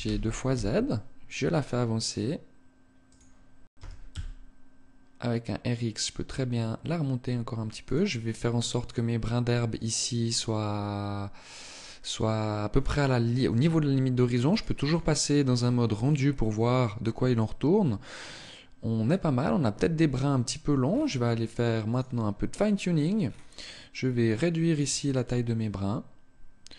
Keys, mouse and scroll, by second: 2.8 click, 3.3 r, 7.5 click, 14.0 click, 14.4 click, 20.3-21.3 scroll down 4, 21.3 click, 22.9 scroll down 1, 23.7 click, 24.0 click, 24.6 click.